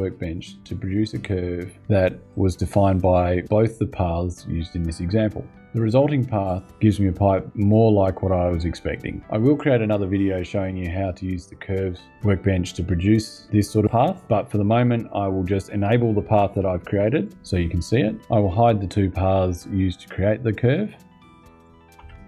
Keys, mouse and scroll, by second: 16.9 click, 21.3 click, 21.7 space, 22.1 click.